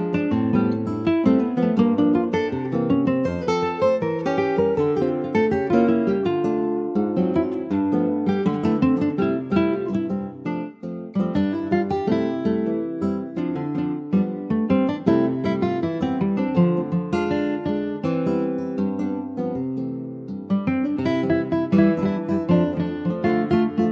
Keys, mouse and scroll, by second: 0.9 click, 1.2-2.3 shift+middle drag, 2.3 scroll up 1, 2.8 ctrl+s, 2.9-3.9 middle drag, 3.9-6.8 drag.